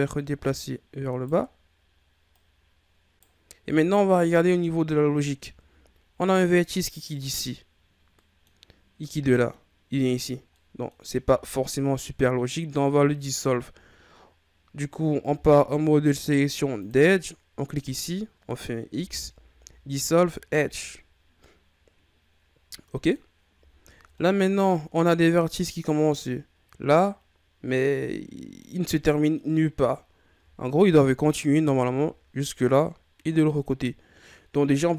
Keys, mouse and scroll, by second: 2.3 right click, 4.8 shift+scroll up 1, 6.0 scroll down 2, 6.1-11.1 middle drag, 11.1-14.0 scroll up 1, 15.3 ctrl+Tab, 17.8 right click, 18.9 x, 21.4-23.2 middle drag, 23.2-23.7 scroll down 2, 23.7-24.2 ctrl+scroll up 3, 24.2 middle click, 24.7-25.8 scroll up 1, 25.8 middle click, 26.3-27.7 scroll up 1, 27.7 scroll down 1, 27.9-30.8 middle drag, 30.8 KP_1, 31.8-34.7 ctrl+scroll down 1.